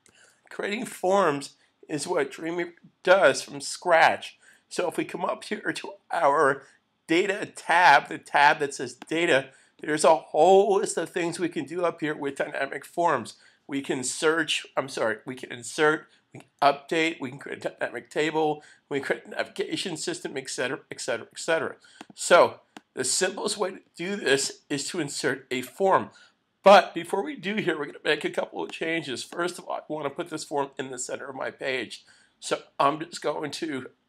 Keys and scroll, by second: 0.1 super+s.